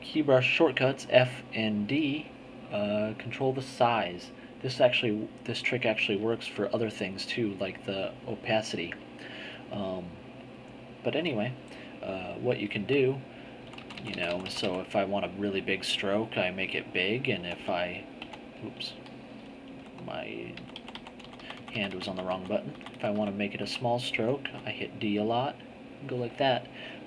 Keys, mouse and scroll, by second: 10.3 click, 13.6 f, 15.5-17.4 drag, 17.4 g, 19.7 f, 20.5 f, 21.2 d, 24.5 d, 25.1-26.7 drag.